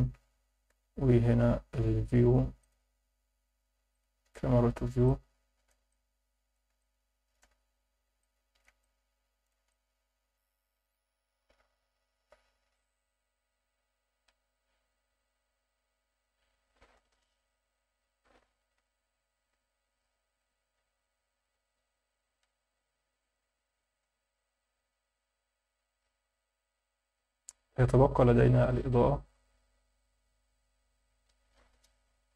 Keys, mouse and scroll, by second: 0.7 n, 2.6 click, 3.9 click, 4.2 n, 5.0 shift+middle click, 5.9 ctrl+middle click, 6.8 shift+middle click, 8.2 ctrl+alt+shift+middle click, 8.8 middle click, 9.7 shift+middle click, 19.5 n, 20.4 click, 20.6 n, 21.0 scroll up 2, 22.3 n, 23.2 click, 23.5 n, 30.1-31.7 right drag.